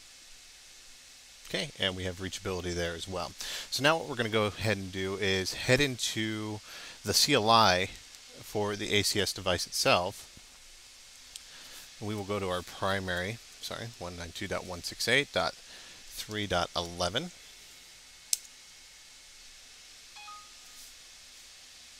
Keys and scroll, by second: 21.2 Return.